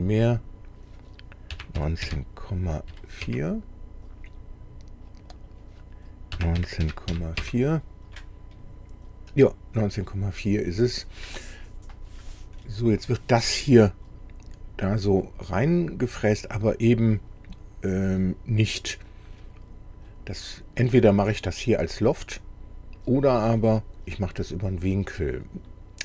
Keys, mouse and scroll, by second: 0.3 click, 1.5 KP_1, 1.8 KP_6, 2.0 KP_Decimal, 2.9 KP_4, 3.2 KP_Enter, 5.2 click, 6.4 KP_1, 6.6 KP_9, 6.8 KP_Decimal, 7.1 KP_4, 7.4 KP_Enter, 8.5 scroll up 2, 9.3-10.0 scroll down 4, 12.6-15.5 drag, 15.5-19.5 middle drag, 20.3-21.4 middle drag.